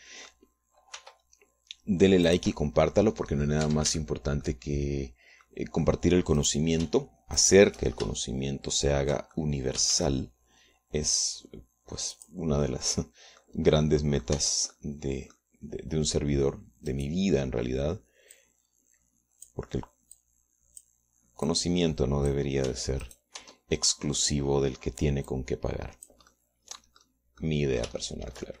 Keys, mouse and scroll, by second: 0.5 shift+middle click, 1.2 shift+middle click, 2.4 r, 3.8-4.8 drag, 5.4 shift+Tab, 5.4-7.8 shift+middle drag, 7.8 right click, 8.8 shift+right click, 10.5 shift+middle click, 11.1 shift+click, 11.4 shift+d, 11.4-13.6 shift+middle drag, 14.1 click, 15.2 click, 15.8 Tab, 16.2 click, 19.8-21.2 drag, 21.6 click, 23.0-24.0 drag, 24.2 Tab, 24.5 click, 24.8 Tab, 26.8-27.8 drag, 27.8 middle click.